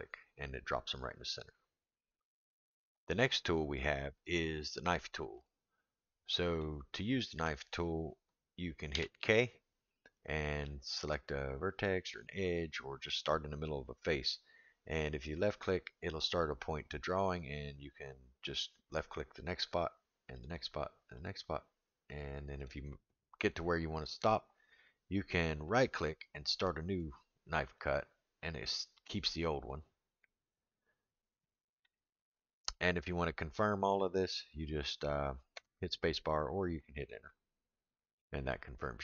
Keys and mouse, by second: 5.4 click, 6.6 middle click, 8.9 k, 38.2-39.0 middle drag.